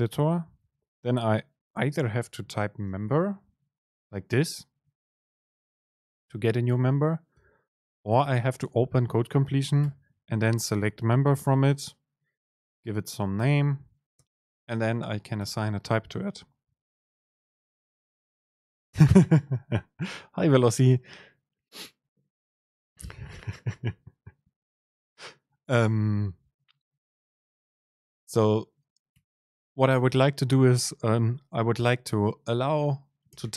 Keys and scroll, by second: 6.8 super+z, 6.8 super+z, 8.0 super+space, 14.3 super+space, 29.2 BackSpace.